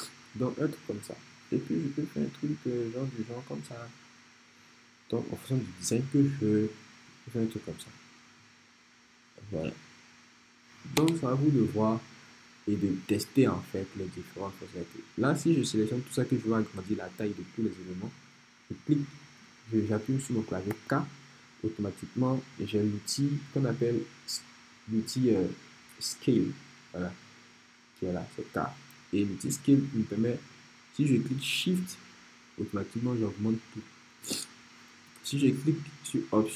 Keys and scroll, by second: 11.0 BackSpace, 20.7 k, 35.2 super+z.